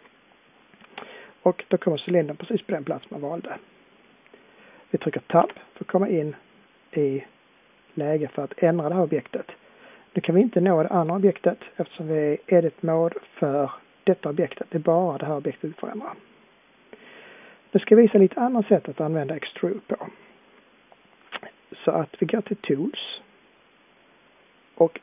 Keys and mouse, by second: 5.5 Tab, 7.1 click.